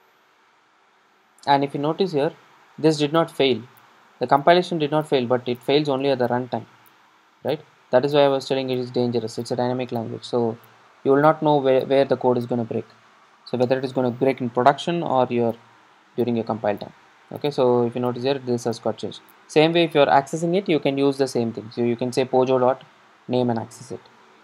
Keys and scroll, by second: 9.2 super+r.